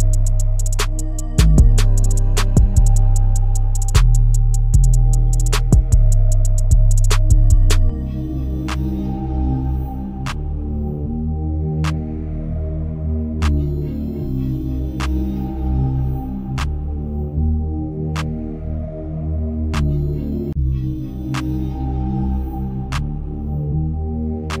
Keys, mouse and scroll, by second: 2.8 drag, 3.6 click, 4.3 shift+click, 4.8 shift+click, 4.8-7.1 middle drag, 7.1-8.3 drag, 8.3-11.2 middle drag, 11.2 x, 13.8 shift+a, 15.4 r, 17.2 KP_7, 18.4 g, 21.0 s, 21.1 KP_0, 22.4 s, 23.2-24.6 scroll down 4.